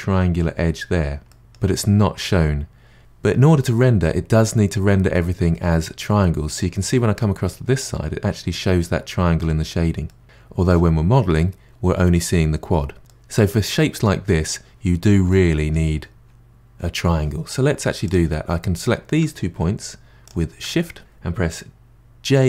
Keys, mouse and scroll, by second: 1.3-3.0 middle drag, 4.3-7.3 middle drag, 10.1-12.3 middle drag, 13.1-18.1 middle drag, 18.1 click, 20.3 shift+click.